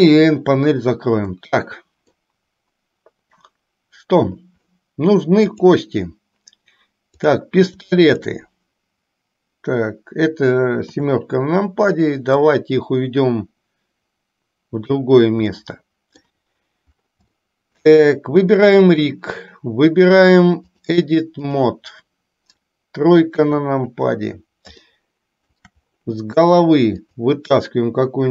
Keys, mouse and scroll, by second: 0.0 n, 1.5 scroll up 1, 1.6-2.4 middle drag, 8.4 shift+click, 11.0 KP_7, 12.7-15.2 drag, 15.9-16.5 middle drag, 17.6-18.0 shift+middle drag, 19.1 click, 20.9-22.0 drag, 23.4 KP_3, 25.1 shift+middle click, 27.1 click.